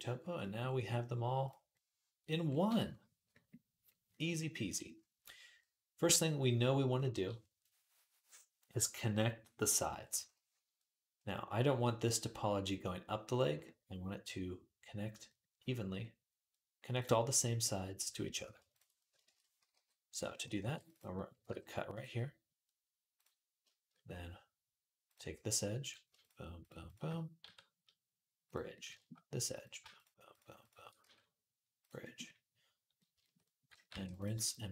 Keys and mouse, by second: 1.7-2.9 middle drag, 3.2 middle click, 3.4-19.5 middle drag, 16.7 click, 19.1 shift+Tab, 19.5-23.7 drag, 19.5 g, 20.4 ctrl+r, 21.3 g, 23.7-24.9 middle drag, 24.9 click, 25.7 shift+middle click, 26.4 shift+click, 26.5-29.7 shift+middle drag, 27.2 q, 29.7 click, 29.8 middle click, 30.4 shift+click, 30.5-33.7 shift+middle drag, 30.8 q, 33.7 ctrl+r, 33.7-34.7 ctrl+drag, 34.5 g.